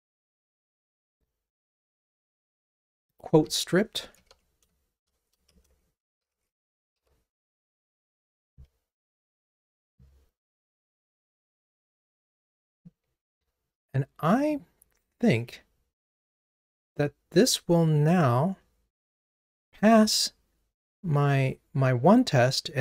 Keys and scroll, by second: 13.4 super+c, 16.5 super+v.